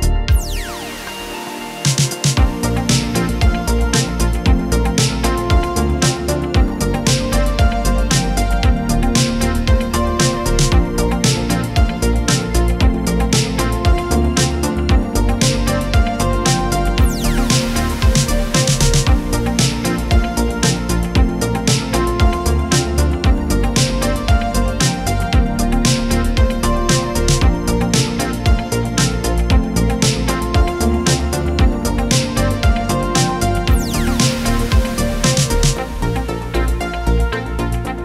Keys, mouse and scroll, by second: 1.2-1.8 drag, 5.0 scroll down 1, 5.1-6.6 scroll up 1, 7.1 click, 10.1-11.0 typing, 12.5 click, 14.6-15.3 typing, 16.3 click, 16.5 typing, 18.9-19.3 scroll up 1, 19.3-19.7 scroll down 1, 19.7-20.3 scroll up 1, 20.4-22.3 scroll down 1, 24.1 click, 27.2 Up, 27.8 Up, 30.6 click, 34.9 click, 35.4-36.1 typing, 37.4 click, 37.7-38.0 typing.